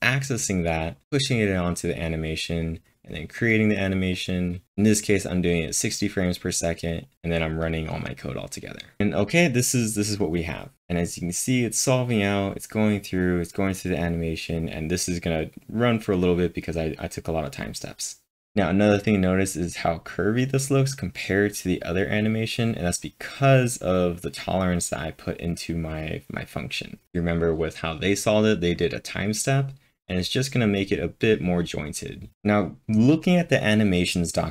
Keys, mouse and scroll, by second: 0.0-1.4 typing, 0.9 click, 1.0 click, 2.6 click, 4.1 double click, 4.6 click, 5.5-6.2 typing, 6.9 click, 7.7 click.